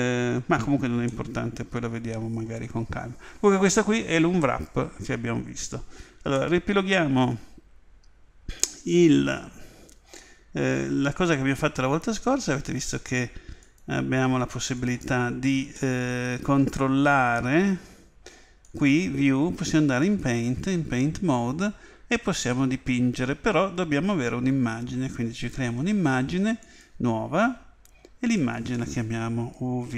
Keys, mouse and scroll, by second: 1.1-3.0 middle drag, 6.3-8.3 middle drag, 13.6 click, 15.8-17.7 middle drag, 18.6 click, 26.6 click.